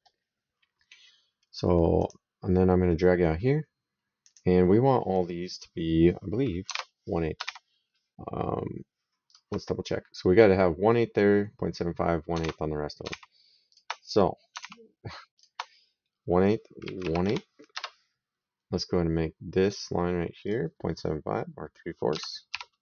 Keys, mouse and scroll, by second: 1.8 click, 4.1 click, 6.5 alt+Tab, 7.3 alt+Tab, 9.1 alt+click, 12.2 alt+Tab, 12.9 alt+Tab, 13.6 alt+click, 14.6 alt+Tab, 15.2 alt+click, 16.6 KP_1, 16.8 KP_Divide, 17.1 KP_8, 17.6 KP_Enter, 19.4 click, 21.9 KP_3, 22.3 KP_Divide, 22.7 KP_4.